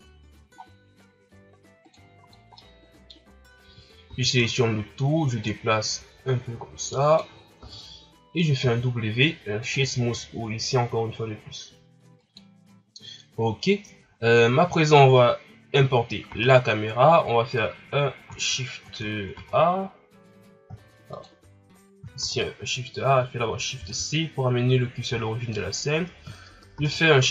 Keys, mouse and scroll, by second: 2.3 scroll down 1, 2.5-3.6 middle drag, 3.6 a, 4.1 a, 4.4-5.4 scroll down 3, 5.4-7.6 drag, 7.6 Tab, 9.7 w, 12.2 KP_1, 21.1 click, 22.8 shift+a, 23.7 shift+c, 24.7-25.5 scroll up 1, 25.5-27.3 scroll up 5.